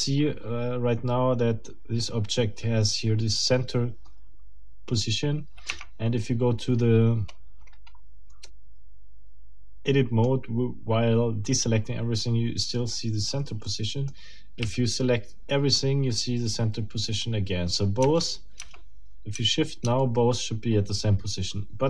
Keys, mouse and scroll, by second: 5.7 Tab, 7.3 scroll up 2, 7.8 scroll up 2, 8.5-10.4 middle drag, 13.6 middle click, 14.6 a, 18.0 Tab.